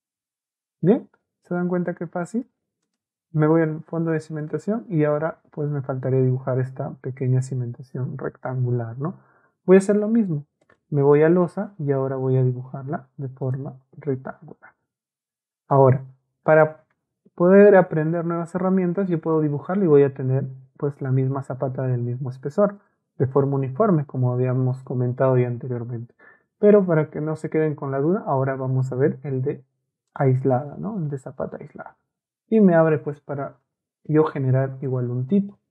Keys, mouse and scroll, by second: 2.8 click, 10.6 click, 13.4 click, 22.8 click, 23.9 Escape, 30.1 middle click, 33.6 ctrl+a, 34.9-35.7 ctrl+right drag.